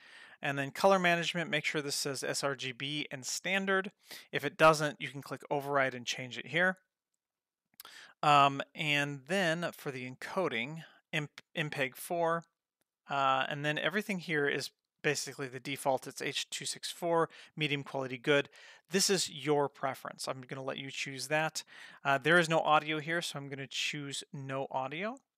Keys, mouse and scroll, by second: 0.7 click, 1.3-3.8 scroll down 1, 5.2 click, 7.8 click, 8.7 click, 9.3-9.7 scroll down 1, 10.0 click, 10.1-11.5 scroll down 4, 11.5 scroll down 1, 21.1-22.6 scroll down 4, 22.6-24.6 drag.